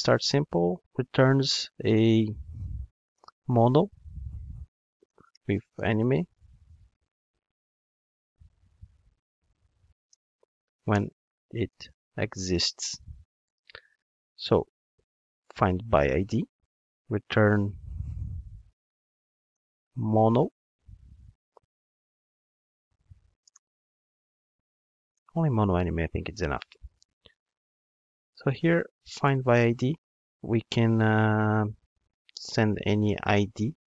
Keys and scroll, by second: 14.7 super+c, 29.4 Return.